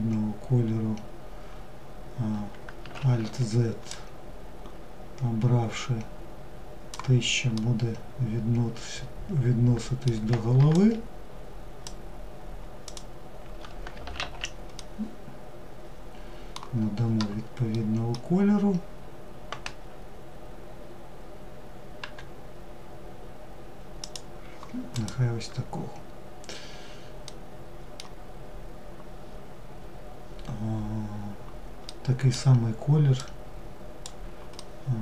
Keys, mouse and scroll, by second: 3.1 drag, 6.8-9.8 middle drag, 10.0 shift+click, 12.1 shift+click, 13.4 alt+z, 14.0-19.9 middle drag, 24.1 click, 26.4-27.6 middle drag, 27.6-28.8 scroll down 1, 28.8-30.6 scroll down 1, 31.1-32.4 middle drag, 32.4 click, 33.8-35.0 middle drag.